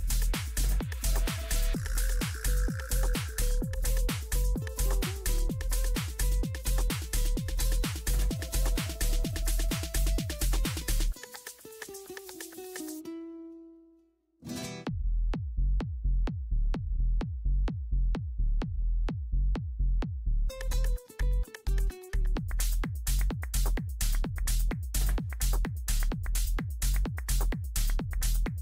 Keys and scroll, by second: 23.6 ctrl+End, 25.8 ctrl+Page_Down.